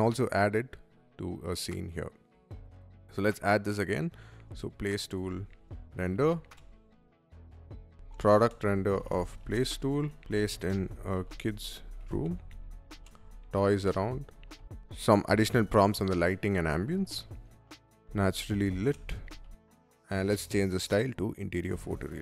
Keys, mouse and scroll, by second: 2.2 click, 3.9-14.9 typing, 6.9 ctrl+v, 7.6 click, 17.3-19.7 typing, 19.5 click, 20.7 click.